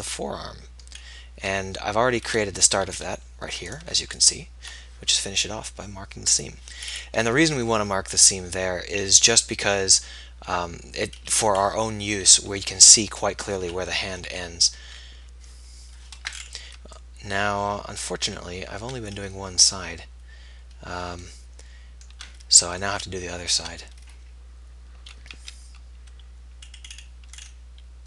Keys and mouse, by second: 0.4 middle click, 3.8-6.4 right drag, 7.0-8.2 middle drag, 8.8-10.6 middle drag, 14.4 KP_7, 18.9-25.6 middle drag, 25.6 z.